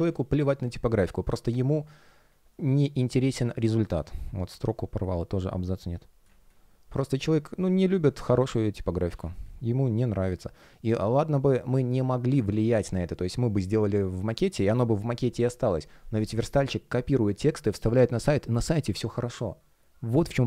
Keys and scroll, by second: 0.5 space, 6.1 space.